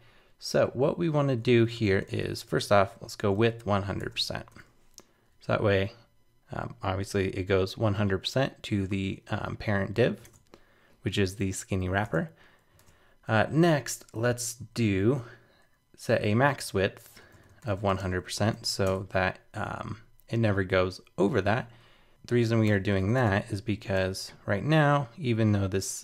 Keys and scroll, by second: 3.8 super+s, 4.0 super+Tab, 4.5 super+r, 10.3 super+Tab, 22.7 super+/, 22.9 super+s, 23.2 super+Tab, 24.0 super+r.